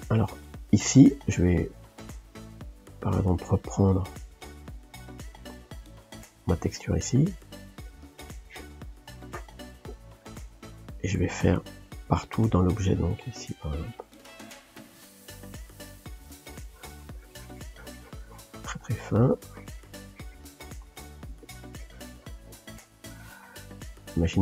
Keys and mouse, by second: 0.0-5.8 middle drag, 5.8-7.7 drag, 7.7 f, 9.2-12.6 ctrl+middle drag, 12.6 f, 14.0 click, 15.0 middle click, 15.5 f, 16.5-18.7 drag, 18.7 middle click, 19.3-20.5 drag, 20.5 middle click, 21.1 f, 21.7-23.1 drag, 23.1 shift+middle click, 23.8 f.